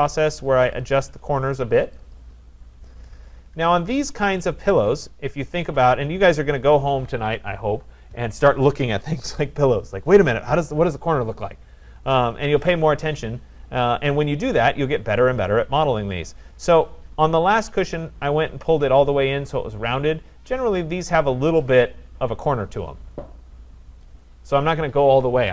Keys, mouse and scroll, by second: 0.8 click, 1.0 click, 2.0 click, 2.2 click, 2.7-3.9 scroll, 4.4 click, 4.9 click, 5.7 click, 6.4 shift+click, 7.2 shift+click, 14.7 click, 17.5 scroll, 24.0 click.